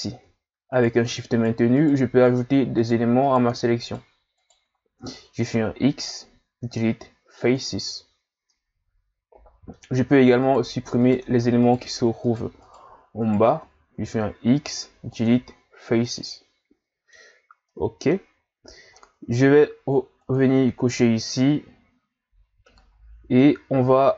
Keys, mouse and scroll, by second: 0.7 shift+right click, 1.3 shift+Right, 1.7 shift+Right, 2.2 shift+Right, 2.8 shift+Right, 3.2 shift+Right, 3.8 shift+right click, 4.4 shift+right click, 5.6 x, 8.5-10.4 middle drag, 10.4 shift+right click, 11.0 shift+right click, 11.6 shift+right click, 12.2 shift+right click, 12.6 shift+right click, 13.2 shift+right click, 14.0 x, 16.0-18.3 middle drag, 18.3 scroll up 2, 18.9 shift+scroll down 3, 20.2 click, 20.9-23.9 middle drag.